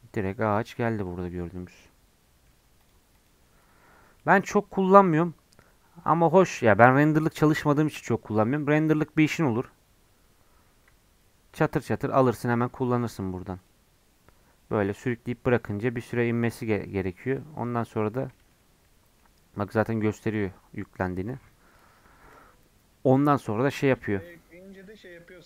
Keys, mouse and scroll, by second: 1.6 scroll down 1, 1.7-2.8 middle drag, 2.8-6.1 drag, 16.2-17.7 middle drag, 17.7 scroll up 3, 17.9-23.0 middle drag, 23.0-25.4 scroll down 1.